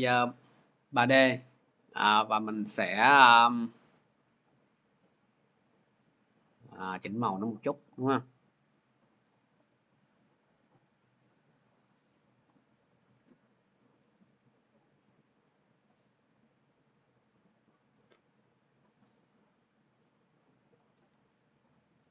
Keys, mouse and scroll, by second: 2.5 click, 7.4 click, 8.9 click, 9.8 click, 14.7 click, 15.8-22.1 drag.